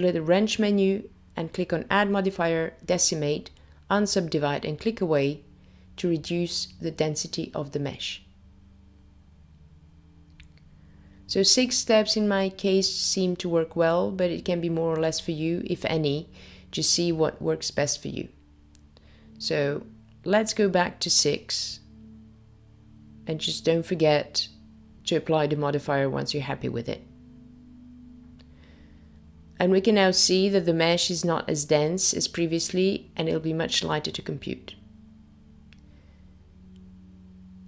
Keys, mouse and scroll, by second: 1.2 click, 2.0 click, 2.7 click, 3.6 click, 5.5 click, 7.5 click, 12.6 click, 15.7 middle click, 21.6 click, 23.2 click, 27.1 click, 29.9 click, 32.5 click, 34.2 middle click, 37.4 click.